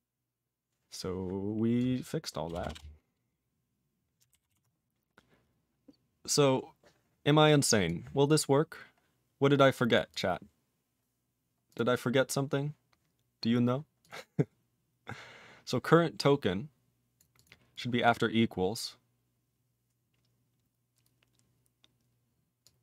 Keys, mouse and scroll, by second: 1.7 click, 2.5 BackSpace, 2.6 BackSpace, 2.7 BackSpace, 3.3 Delete, 4.6 ctrl+s, 4.7 scroll up 5, 6.7-7.4 scroll up 1, 7.4 click, 7.8 click, 8.2 click, 8.3 click, 8.6 scroll down 3, 9.3 scroll up 5, 9.9 click, 9.9 click, 10.1 click, 10.1 click, 11.1-11.5 scroll up 3, 11.7 click, 11.8 click, 12.1 scroll up 2, 13.4-14.0 scroll up 1, 14.0 click, 14.1 click, 14.9 scroll up 3, 16.2 click, 17.1 click, 17.3 click, 17.4 click, 17.7 click, 18.0 click, 18.5-19.3 scroll down 5, 22.6 click.